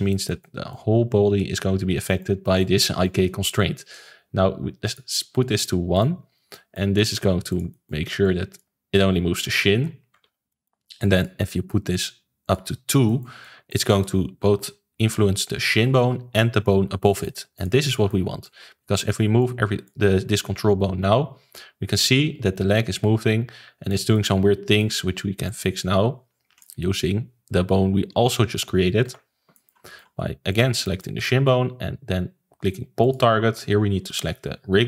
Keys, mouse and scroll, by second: 0.0-4.8 shift+middle drag, 4.8-5.5 drag, 5.5-6.2 middle drag, 6.2 scroll up 1, 6.5-7.4 shift+middle drag, 7.4 click, 7.7-8.2 shift+middle drag, 8.2 click, 8.9 click, 9.7 ctrl+z, 10.1 ctrl+z, 10.4-11.1 middle drag, 11.1 click, 12.4 click, 13.0-16.8 shift+middle drag, 17.0-17.5 middle drag, 17.5 click, 17.9-18.4 middle drag, 18.4 click, 19.3 click, 20.3 click, 24.1-25.4 middle drag, 25.4 click, 29.0 alt+g, 29.5-30.5 shift+middle drag, 30.5 click, 30.8-33.0 shift+middle drag, 33.0-34.8 drag.